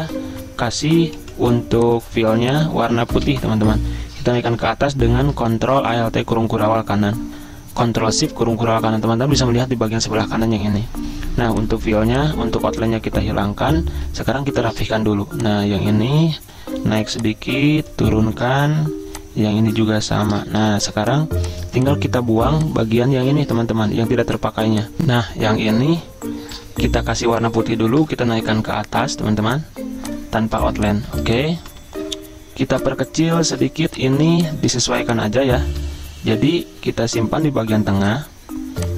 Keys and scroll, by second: 1.3 v, 3.3 d, 4.6 ctrl+shift+], 14.6 ~, 20.6 v, 26.6 d, 28.0 ctrl+], 30.6 z, 31.6 v, 33.8 z, 34.8 v.